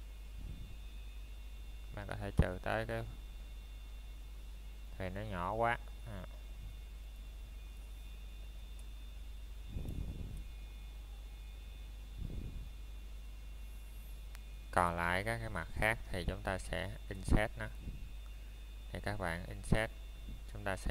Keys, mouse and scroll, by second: 0.5 scroll down 1, 1.0 middle click, 1.4 scroll up 1, 2.6 ctrl+Tab, 3.9 click, 4.5 middle click, 5.9 a, 7.2 middle click, 8.0 scroll up 1, 11.0 middle click, 11.2 scroll down 1, 11.2 typing, 11.7 shift+middle click, 12.3 scroll up 1, 13.4 shift+middle click, 14.8 c, 15.3 middle click, 16.6-17.3 scroll down 1, 17.3 right click, 17.6-17.9 scroll down 1, 17.9 middle click, 18.5 shift+middle click, 19.4 scroll up 1, 20.2 shift+middle click.